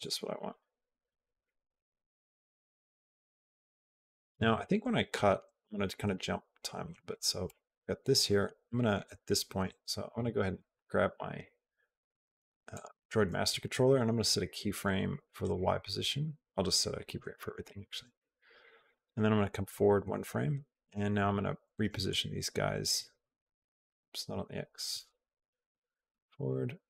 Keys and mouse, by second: 0.3 click, 1.2-4.2 drag, 4.9 Left, 5.2 Left, 5.4 Left, 5.7 Left, 5.9 Left, 6.6 Left, 7.3 Right, 9.5 Left, 12.6 click, 15.2 right click, 18.0 i, 19.5 Right, 22.0-23.0 drag, 23.7 ctrl+z, 25.5 Right, 26.7-26.8 drag.